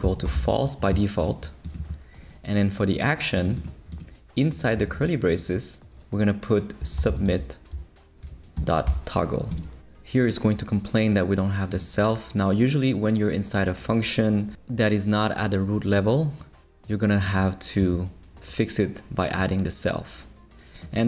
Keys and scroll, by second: 0.0-0.9 typing, 6.6-9.3 typing, 9.5 Return.